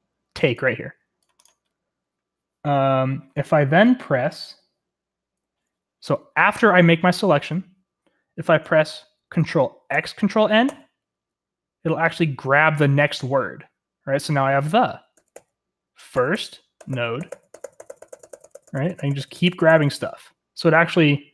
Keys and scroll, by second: 9.9 ctrl+x, 10.6 ctrl+n, 15.1 ctrl+x, 15.3 ctrl+n, 16.1 ctrl+x, 16.3 ctrl+n, 16.7 ctrl+x, 16.9 ctrl+n, 17.1 ctrl+x, 17.3 ctrl+n, 17.5 ctrl+x, 17.6 ctrl+n, 17.7 ctrl+x, 18.3 ctrl+n, 18.4 ctrl+x, 18.7 ctrl+n, 18.9 ctrl+x, 18.9 ctrl+n, 19.1 ctrl+x, 19.2 ctrl+n, 19.3 ctrl+x, 19.6 ctrl+x, 19.6 ctrl+n, 19.8 ctrl+x, 19.9 ctrl+n.